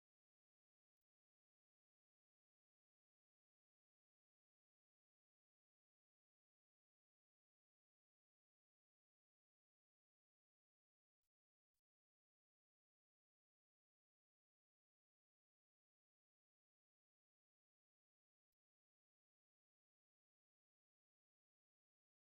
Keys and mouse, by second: 0.0 middle click, 0.6 z, 0.9 right click, 2.2 right click, 3.0 middle click, 3.4 right click, 3.9 right click, 5.0 right click, 5.8 ctrl+middle click, 6.6 right click, 7.6 shift+middle click, 8.6 middle click, 9.0 ctrl+Tab, 9.9 ctrl+Tab, 11.5 shift+middle click, 12.2 Tab, 13.3 2, 13.8 alt+right click, 14.3 middle click, 16.2 ctrl+b, 21.5 middle click.